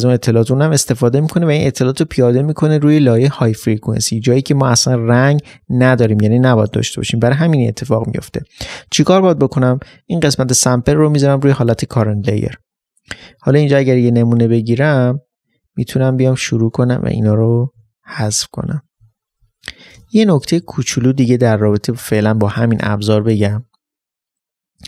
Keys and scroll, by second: 20.0 alt+space.